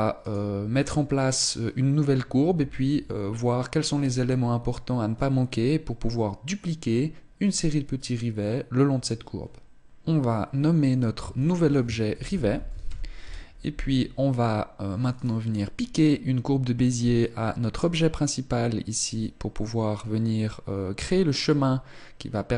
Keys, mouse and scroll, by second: 1.1 right click, 11.9 ctrl+click, 14.9 right click.